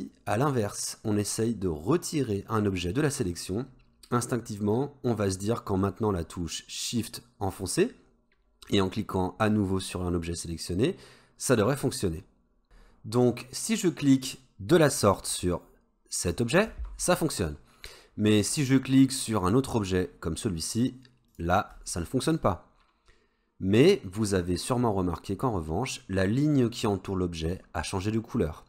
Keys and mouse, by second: 13.3-13.8 middle drag, 16.3 shift+click, 21.3 shift+click.